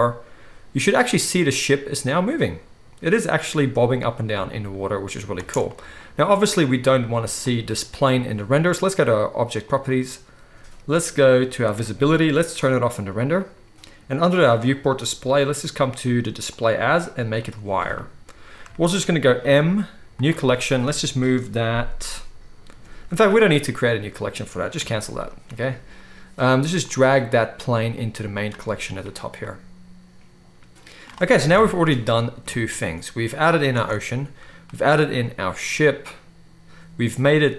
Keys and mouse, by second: 5.4 space, 6.0-9.6 drag, 9.6 middle click, 9.7-11.7 drag, 11.7-13.0 middle drag, 13.0-14.4 drag, 14.4-30.5 middle drag, 18.5-28.4 shift+drag, 18.5-37.5 shift+right drag, 19.3 m, 31.4 KP_0, 31.8 ctrl+s, 33.8 space.